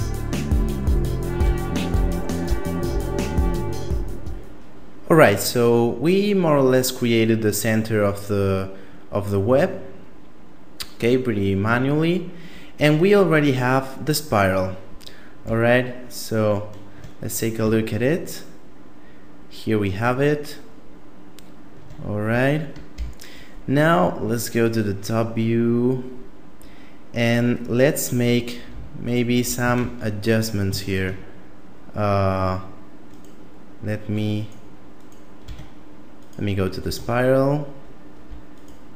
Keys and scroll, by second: 1.5-3.3 typing, 22.9 KP_7, 29.8 ctrl+Tab, 30.9 ctrl+Tab, 35.5 Tab, 36.8 Tab.